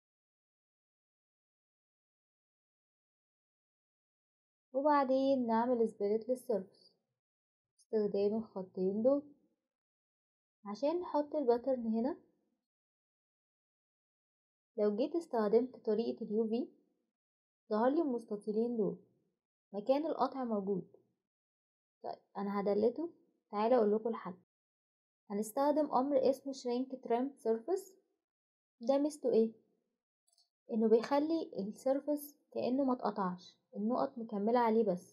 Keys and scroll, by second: 4.4 typing, 21.4 Delete, 24.2 Escape, 25.2 typing, 28.6 typing, 34.8 ctrl+z.